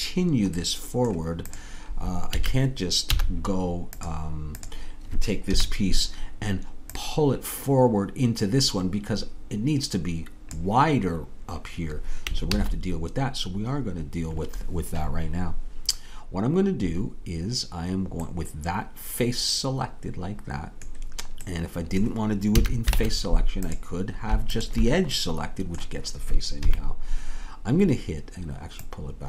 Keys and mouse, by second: 1.9-4.0 drag, 2.3 a, 5.5-6.7 drag, 5.5 KP_3, 7.0-8.7 drag, 12.6 ctrl+z, 22.2-26.2 middle drag, 22.6 a, 23.0 ctrl+Tab, 26.6 KP_3, 28.9-29.2 drag.